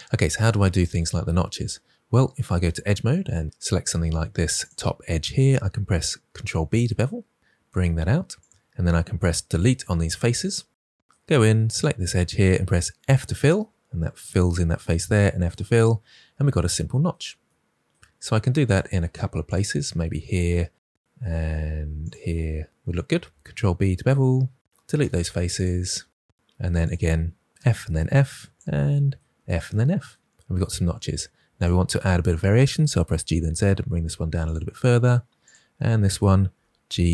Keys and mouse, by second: 2.6 2, 3.4 ctrl+z, 6.4 ctrl+b, 9.4 Delete, 12.1 click, 13.0 f, 15.1 f, 18.6 click, 23.2 ctrl+b, 25.4 Delete, 26.6 2, 27.6 f, 27.9 f, 28.5 click, 29.3 f, 29.6 f, 31.5 click, 32.9 g, 33.2 z, 34.4 click, 35.4 click, 36.4 g.